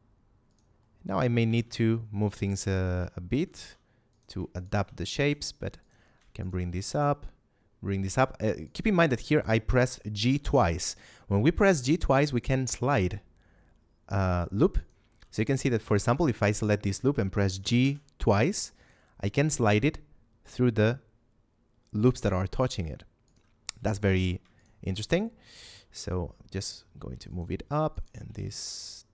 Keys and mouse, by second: 0.4 shift+click, 0.7 shift+middle click, 1.3 a, 1.5 z, 2.3 middle click, 2.7 shift+middle click, 3.4 ctrl+Tab, 4.1 click, 4.5 alt+right click, 4.9 g, 5.7 click, 6.3 alt+right click, 6.7 g, 8.5 right click, 10.1 g, 14.7 right click, 15.8 alt+right click, 17.5 g, 23.2 right click, 23.9 ctrl+z, 25.4 g, 27.2 click, 27.9 alt+right click, 28.3 g.